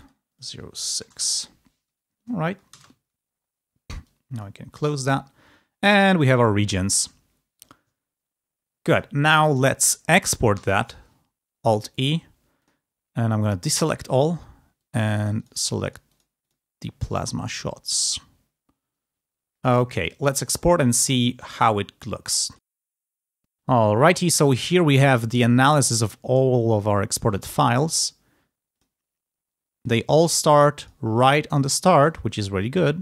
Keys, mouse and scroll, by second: 1.0 BackSpace, 2.6 ctrl+space, 3.8 click, 4.8 click, 6.4-6.7 ctrl+scroll down 2, 10.5 alt+e, 12.5 click, 13.5 click, 14.6-16.2 drag, 16.4 click, 17.8-22.6 drag, 23.9-25.0 drag, 28.6 click, 29.8 click, 30.7 click, 31.8 click, 32.7 click.